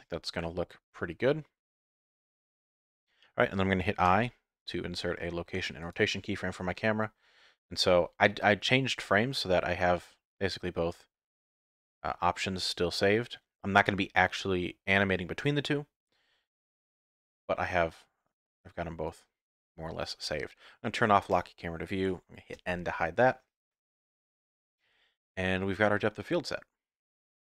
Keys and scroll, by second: 22.5 n.